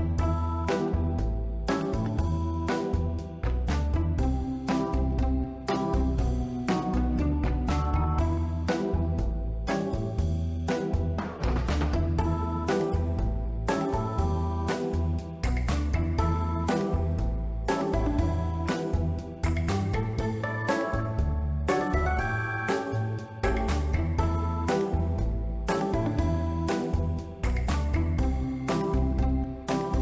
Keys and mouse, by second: 0.6 click, 2.0 Tab, 2.1 middle click, 2.8 s, 7.1 click, 8.1 g, 9.2 click, 9.7 g, 10.0 z, 11.2 click, 11.4 g, 12.4 click, 13.0 g, 13.6 click, 15.1 click, 15.8 z, 16.5 click, 16.9-18.0 middle drag, 18.3 ctrl+middle click, 18.7 middle click, 19.1 shift+a, 19.3 shift+a, 21.3 s, 22.4 click, 22.8 ctrl+middle drag, 23.0-23.6 middle drag, 23.9 ctrl+middle click, 24.1 middle click, 24.4 ctrl+middle click, 25.0 middle click, 25.6 ctrl+middle click, 25.9 middle drag, 26.4 ctrl+middle click, 26.7 middle click, 27.3 click, 28.0 middle click, 28.7-30.0 drag.